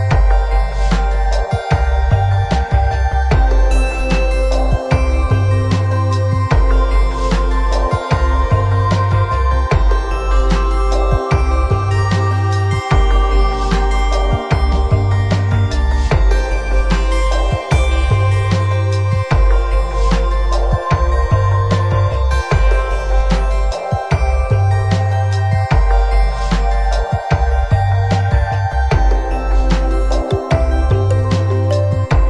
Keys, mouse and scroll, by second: 8.8 click, 9.8 click, 10.4 scroll down 1, 11.0 scroll down 2, 11.7 middle click, 13.9 middle click, 15.4 click, 17.3 scroll down 5, 17.9 click, 23.3 click, 23.9-26.0 click, 29.9 middle click.